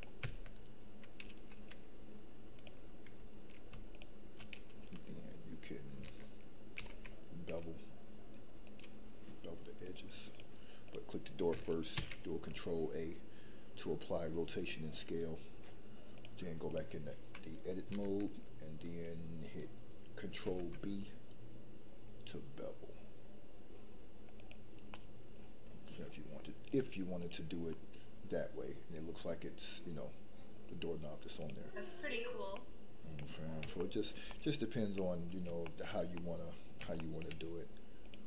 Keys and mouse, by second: 6.8 ctrl+b, 10.0 click, 10.8 click, 11.9 ctrl+a, 16.3 click, 20.4 ctrl+b, 24.9 middle click, 26.8 click, 27.7-30.5 middle drag, 31.3 click, 32.5-33.2 middle drag, 33.7 shift+middle drag, 34.3-35.0 middle drag, 35.6 shift+middle click, 36.1 middle click, 36.9-37.3 shift+middle drag, 38.0-38.2 drag.